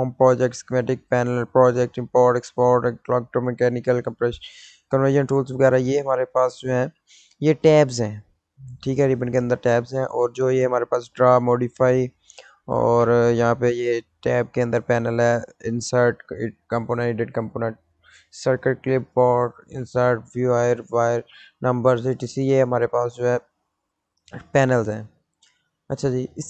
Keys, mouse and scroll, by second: 5.4 click, 13.8 click, 22.6 click, 22.6 click.